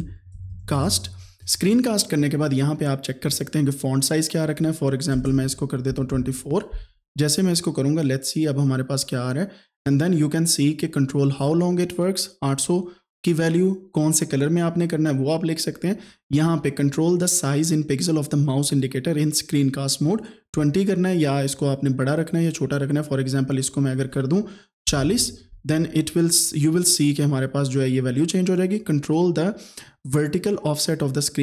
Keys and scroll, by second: 0.0-1.5 typing, 5.2 BackSpace, 5.7 BackSpace, 5.9 KP_2, 6.2 KP_4, 24.9 KP_4, 25.0 KP_0.